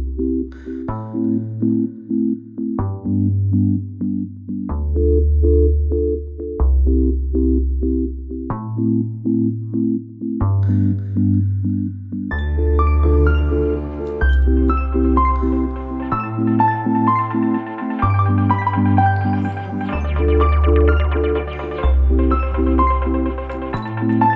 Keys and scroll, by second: 6.6 space, 9.9 space, 14.6 space, 18.6 space, 21.7 space, 23.4 ctrl+z, 24.1 ctrl+z.